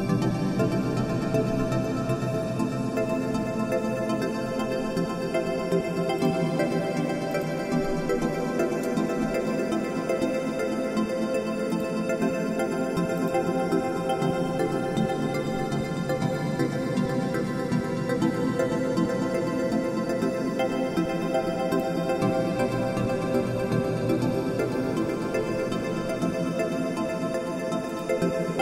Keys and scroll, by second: 8.6 alt+super+u, 10.6 b.